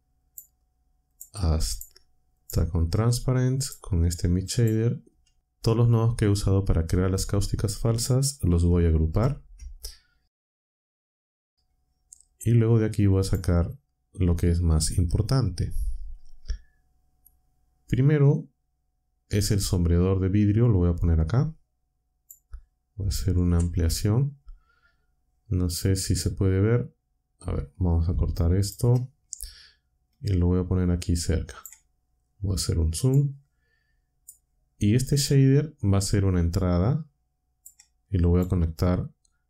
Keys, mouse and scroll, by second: 0.2 shift+click, 1.1 shift+click, 1.7 shift+click, 2.3 shift+click, 3.5 shift+click, 4.4 shift+click, 10.4 ctrl+g, 13.2 click, 20.3-22.4 drag, 23.4 ctrl+Up, 28.4 ctrl+click, 30.1-31.7 drag, 33.0-34.4 drag, 35.4-37.8 drag, 38.2 click.